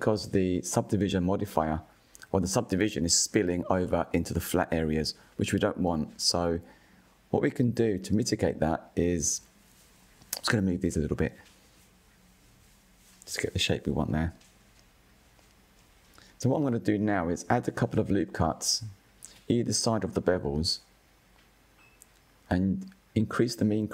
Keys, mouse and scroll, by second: 2.9 alt+click, 4.4-5.1 drag, 5.7 alt+click, 6.3 alt+shift+click, 7.6 alt+shift+click, 8.8-10.4 drag, 13.4 scroll up 3, 13.7-14.3 shift+middle drag, 14.3-14.9 scroll up 2, 14.9-15.5 scroll down 4, 15.5 click, 15.9-16.3 scroll down 4, 16.5 scroll up 6, 17.2 scroll up 2, 18.1 scroll up 3, 19.7 scroll down 5, 20.2-21.1 shift+middle drag, 21.1-21.4 scroll down 2, 21.4-23.1 shift+middle drag, 23.1 ctrl+r.